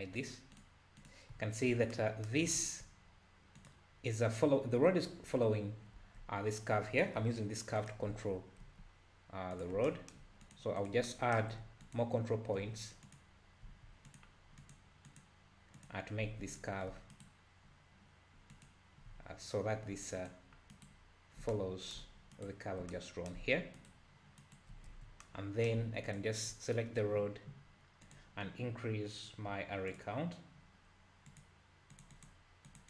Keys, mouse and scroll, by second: 0.2 click, 0.6 click, 1.0 click, 3.6 click, 6.0 Tab, 7.2 KP_7, 7.8 click, 8.6 g, 10.4 click, 10.8 click, 11.8 ctrl+click, 13.0 click, 13.7 Tab, 14.1 click, 14.6 click, 15.1 click, 15.8 click, 16.3 Tab, 16.5 click, 17.1 ctrl+right click, 18.5 ctrl+click, 20.2 ctrl+click, 20.7 ctrl+right click, 22.3 ctrl+right click, 23.8 ctrl+right click, 24.4 ctrl+right click, 24.9 Tab, 26.1 click, 26.5 `, 28.1 drag, 29.9-32.8 drag.